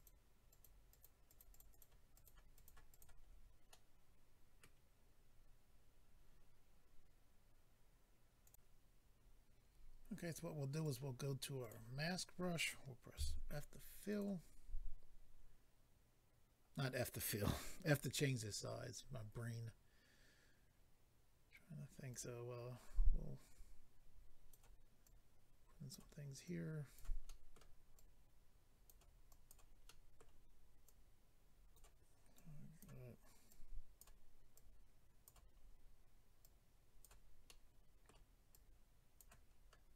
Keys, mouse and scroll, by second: 0.5 click, 0.6 click, 0.9 click, 1.0 click, 1.2 click, 1.4 double click, 1.5 click, 1.6 click, 1.7 click, 1.8 double click, 2.1 double click, 2.2 double click, 2.5 double click, 2.6 double click, 2.9 double click, 3.0 double click, 3.2 scroll down 4, 3.7 middle click, 8.4 click, 10.8 click, 10.9 click, 11.6 click, 11.7 click, 12.0 scroll up 2, 13.1 f, 14.1 click, 18.3 scroll up 1, 22.1 click, 25.0 click, 26.4 click, 27.3 middle click, 28.0 click, 29.3 click, 29.9 middle click, 30.8 click, 32.3 click, 33.5 click, 34.5 click, 35.5-36.4 scroll down 2, 36.4 click, 36.4-36.9 scroll down 1, 37.4 middle click, 38.5 click, 39.5 scroll up 3.